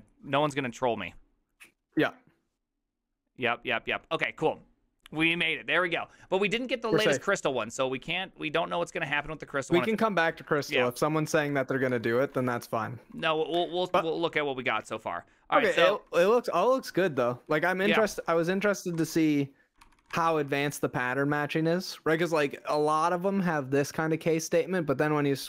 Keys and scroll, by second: 10.4 alt+{, 11.5 ctrl+c, 11.6-20.7 typing, 19.9 ctrl+c.